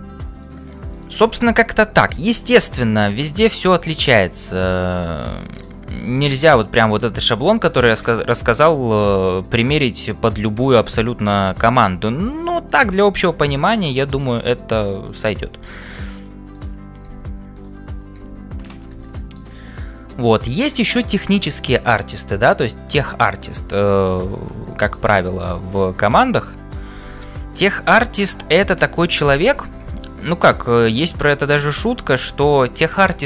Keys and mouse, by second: 1.0 click, 3.1 click, 3.7 click, 4.3 click, 5.5 middle click, 6.0 f, 6.5 middle click, 7.4 click, 7.9 g, 9.4-10.4 middle drag, 10.7 click, 13.8 middle click, 15.4 e, 16.5 click, 17.2 f, 18.2 f, 19.0 shift+middle click, 24.6 shift+middle click, 25.1 middle click, 26.3 click, 31.7 g.